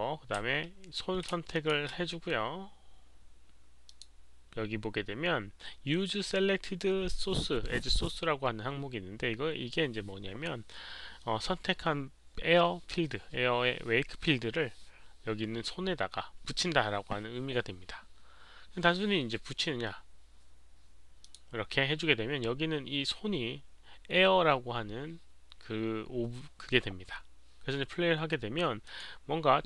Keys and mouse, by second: 1.5 shift+click, 3.8 shift+click, 12.3 click, 21.2 click, 28.8 click.